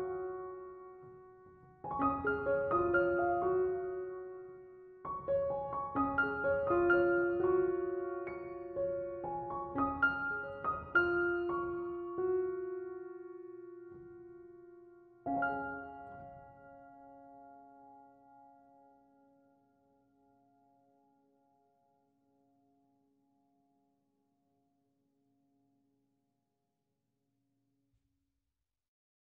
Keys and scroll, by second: 6.4 BackSpace, 23.3 BackSpace.